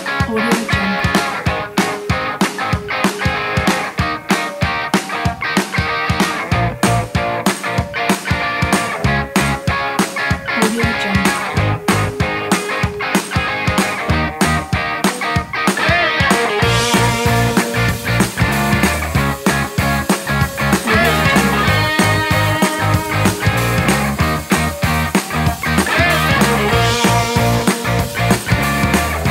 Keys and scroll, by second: 4.4 super+z, 7.8 super+z, 14.2 super+z, 24.4 super+z, 25.9 super+z.